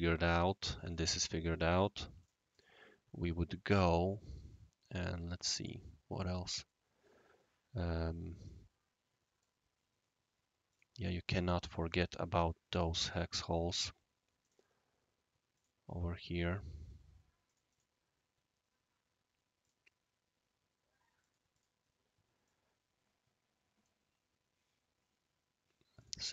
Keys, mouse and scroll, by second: 1.7 click, 2.2 click, 2.5 click, 5.0 click, 5.6 click, 6.1 scroll down 1, 6.6-9.4 right drag, 10.7 click, 11.6 click, 12.5-13.6 scroll up 1, 13.6 s, 14.4 click, 15.5 click, 17.4 click, 17.7 click, 19.6 click, 21.2 click, 21.5 click, 22.4-23.8 right drag, 24.1-24.6 scroll down 2, 26.0 click.